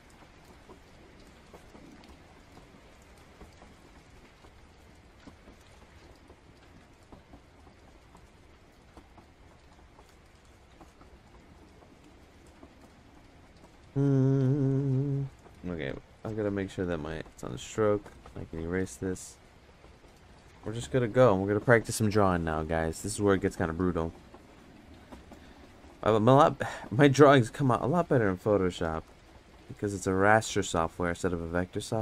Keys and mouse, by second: 1.6 click, 3.2 click, 4.8 click, 5.9 click, 7.0 click, 7.9 click, 8.5 click, 9.9 click, 10.5 click, 10.9 click, 14.7 click, 15.9 click, 16.9 click, 17.5 click, 19.1 click, 20.6 click, 24.4 click, 27.3 click, 29.0 ctrl+z, 29.7 click, 30.4 ctrl+z, 30.7 click, 31.5 ctrl+z, 31.8 click.